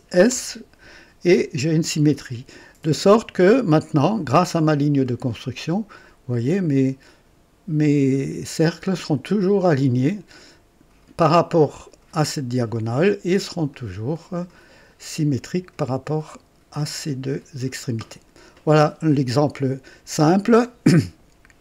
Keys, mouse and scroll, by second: 0.3 s, 1.4 typing, 3.4-12.0 drag, 13.7-15.7 drag.